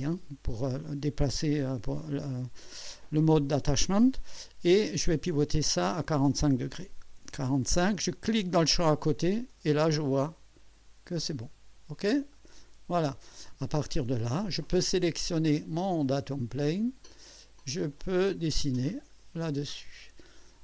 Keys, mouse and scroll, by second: 5.6 click, 6.9 4, 7.2 5, 8.8 click, 10.0-11.3 drag, 12.3 click, 13.9-14.7 drag, 16.6 click, 17.9 click, 18.9-19.2 scroll up 2, 19.4-19.7 scroll down 2, 20.0-20.6 right drag.